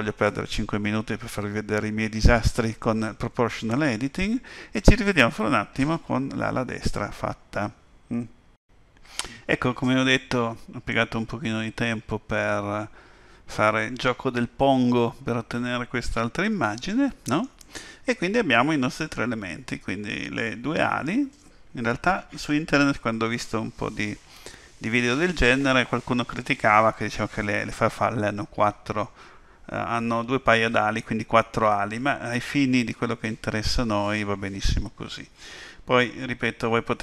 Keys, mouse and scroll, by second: 10.9 middle click.